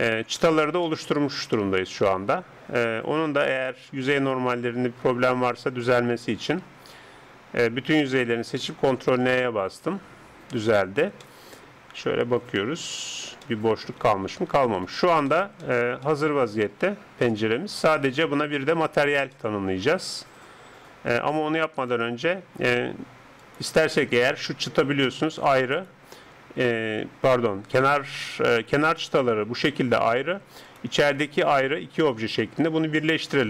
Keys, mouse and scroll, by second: 6.7 Tab, 7.8 a, 8.2 a, 9.0 ctrl+n, 10.5 Tab, 11.2 middle click, 13.9 click, 14.1-18.3 middle drag, 17.3 KP_7, 19.5-21.1 middle drag, 21.9 KP_7, 23.4 right click, 24.4 g, 25.8 right click, 28.9 right click, 29.7 g, 31.5 g.